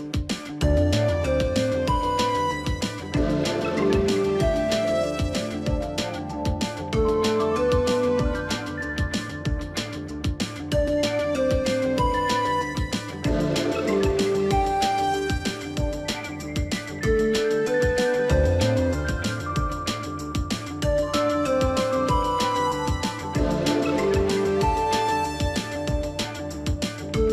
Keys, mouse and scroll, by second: 13.7 double click.